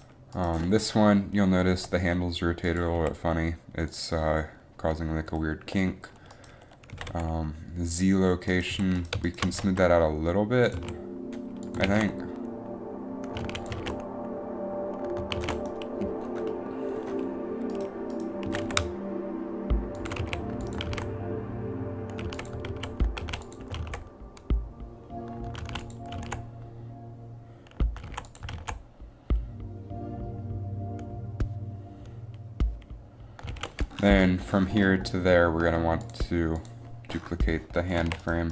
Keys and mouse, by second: 1.8 r, 3.2 r, 7.0 g, 8.6 g, 9.0 g, 9.6 g, 9.7 g, 10.9 a, 12.0 alt+a, 13.7 alt+a, 13.9 alt+a, 14.6 alt+a, 15.8 alt+a, 18.4 alt+a, 18.6 g, 18.7 g, 20.4 a, 21.0 alt+a, 22.5 alt+a, 22.8 alt+a, 23.4 alt+a, 23.9 alt+a, 24.5 alt+a, 25.8 alt+a, 26.3 alt+a, 27.0 alt+a, 28.3 alt+a, 28.6 alt+a, 29.2 alt+a, 30.2 alt+a, 30.4 alt+a, 33.7 alt+a, 38.2 a.